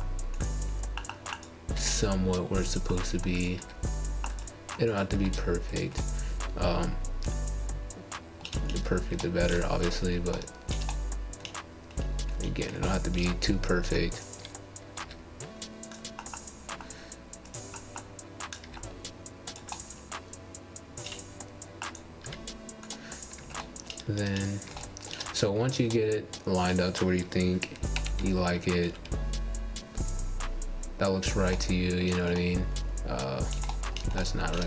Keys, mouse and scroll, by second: 3.4 ctrl+z, 3.6 ctrl+z, 5.8 click, 6.9 r, 10.9 click, 11.8 r, 14.4-15.5 middle drag, 15.5 scroll down 1, 15.8-17.9 middle drag, 17.9 click, 18.7 r, 20.3-22.3 middle drag, 22.3 scroll down 1, 23.4 scroll up 3, 23.7 shift+middle click, 24.3 click, 26.0 g, 27.4 click, 27.7 g, 28.6-29.9 middle drag, 29.9 click, 30.3 click, 31.2 click, 31.5 g, 32.6-34.3 middle drag, 34.3 click.